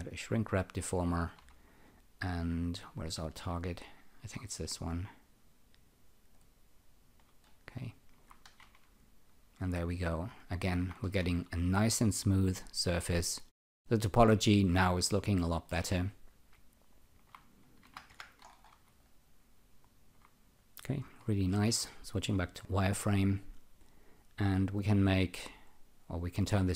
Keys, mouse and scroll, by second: 4.3 click, 7.4 alt+right click, 7.8 alt+click, 8.6 ctrl+r, 9.9 alt+click, 11.2 ctrl+r, 13.2 alt+right click, 13.8 alt+click, 15.3 alt+middle click, 15.9 alt+click, 17.6-18.5 typing, 18.4-18.8 scroll down 3, 19.0 alt+click, 21.2-22.0 typing, 23.4 click, 24.0 click, 25.0 right click.